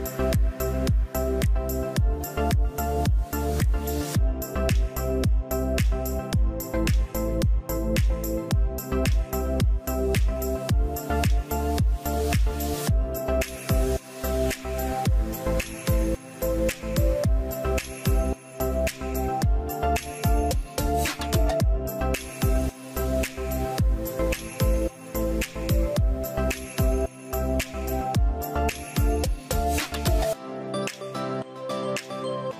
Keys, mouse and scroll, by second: 14.7 scroll up 1, 16.3 Return, 16.4 0.